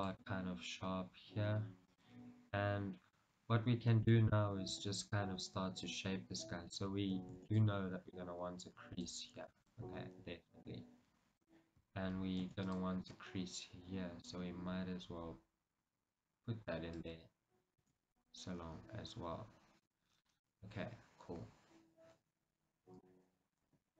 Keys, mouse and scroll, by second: 2.1 click, 2.5 scroll down 1, 2.7-4.9 middle drag, 4.9 KP_1, 6.3 scroll up 1, 7.5 ctrl+r, 9.2 click, 9.6 ctrl+r, 11.7 click, 12.6 ctrl+r, 17.2 click, 18.0 ctrl+r, 20.1 click, 20.3 scroll down 1, 20.6-23.9 middle drag, 23.8 KP_1.